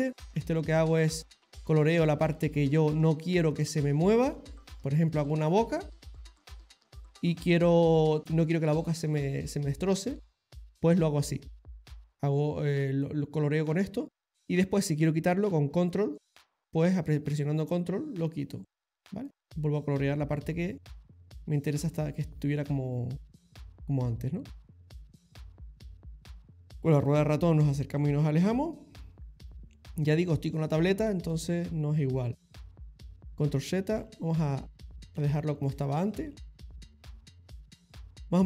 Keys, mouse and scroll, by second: 0.7 click, 2.6 middle click, 2.9 middle click, 3.5 click, 5.2 middle click, 5.9 click, 11.9 click, 13.0 click, 15.9 ctrl+click, 19.5 middle click, 20.1 ctrl+click, 23.2 ctrl+middle click, 25.2 ctrl+middle click, 25.7 ctrl+click, 27.4 middle click, 31.3 middle click, 32.6 middle click, 33.5-34.6 ctrl+z, 34.8 ctrl+z, 35.2 ctrl+z, 35.7-36.3 ctrl+z, 37.1 middle click, 38.0 middle click.